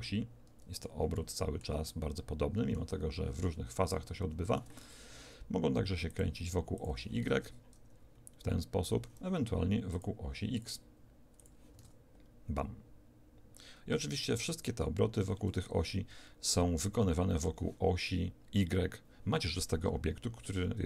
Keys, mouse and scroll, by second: 4.3 Escape, 6.0 click, 7.1 alt+a, 8.9 Escape, 9.9-12.5 drag, 11.7 alt+a, 15.0 Escape.